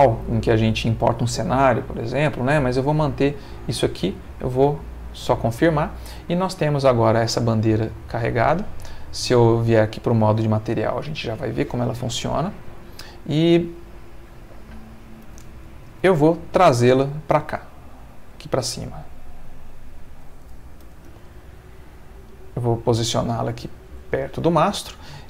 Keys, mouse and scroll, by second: 4.6 click, 5.8 middle click, 8.2 click, 10.6 shift+middle click, 12.9 click, 14.8 click, 16.1 g, 19.8 ctrl+click, 20.8 g, 21.1 y, 22.6 click, 23.5 shift+middle click, 24.5-25.2 middle drag.